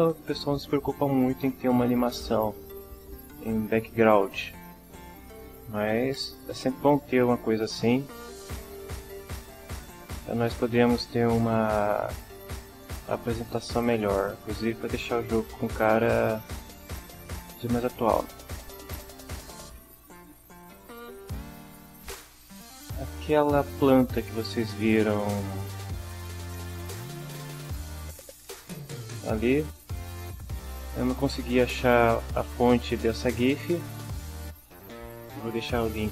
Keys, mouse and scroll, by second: 15.0-15.4 drag, 19.1 click, 20.4-21.0 drag, 21.9-24.9 drag, 26.9-29.0 drag, 29.7 click.